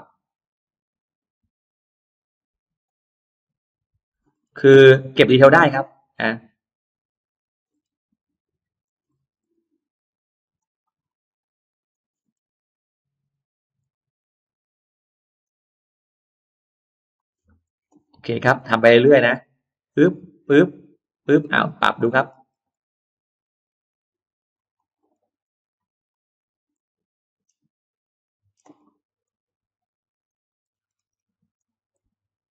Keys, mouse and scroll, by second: 0.6 click, 1.1-1.4 scroll up 2, 2.0 click, 2.6 click, 3.8 click, 4.2 scroll down 1, 4.8-5.5 scroll up 2, 6.0 click, 6.2-6.5 scroll down 1, 6.6-7.0 scroll up 1, 7.3 click, 7.5-7.8 scroll down 2, 8.0 scroll up 2, 8.6 click, 8.9-9.5 scroll down 2, 9.6-10.0 scroll up 1, 10.4 click, 11.1 click, 11.8 click, 12.0-12.7 scroll down 2, 12.9-13.3 scroll up 2, 13.6 click, 14.4 click, 15.2 click, 16.0 click, 17.0 click, 17.4-17.7 scroll down 2, 18.2-18.6 scroll up 2, 19.1 click, 19.9 click, 20.9 click, 21.2 middle click, 21.4-21.8 scroll down 1, 21.9 middle click, 22.2 scroll down 2, 22.5 scroll up 2, 23.4 scroll up 2, 23.8 click, 24.6 click, 24.8 scroll down 1, 25.2 scroll up 1, 25.9 click, 26.2-26.5 scroll down 1, 26.6 middle click, 27.2-27.6 scroll down 2, 27.6-27.9 scroll up 2, 27.8 middle click, 28.4 scroll down 2, 30.1 click, 30.4-30.7 scroll down 1, 30.7-31.0 scroll up 1, 31.4 click, 31.8 middle click.